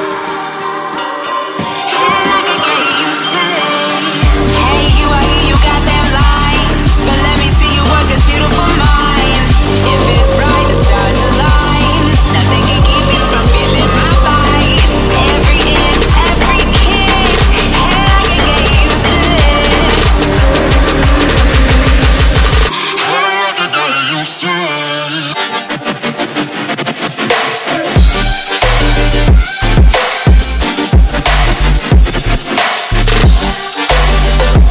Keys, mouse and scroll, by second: 0.5 F10, 0.9 click, 4.6 KP_2, 4.8 KP_0, 5.6 Return, 6.9-7.3 scroll down 2, 8.2 scroll down 1, 9.8 click, 9.9 F10, 10.2 click, 15.9 F10, 16.1 click, 20.6 right click, 21.1 scroll up 1, 21.5-22.6 right drag, 22.4-23.5 typing, 23.2-25.6 drag, 24.7-26.5 typing, 27.4 click, 29.4 Tab, 29.4 F10, 30.2 click, 30.8-32.3 typing, 34.0 click.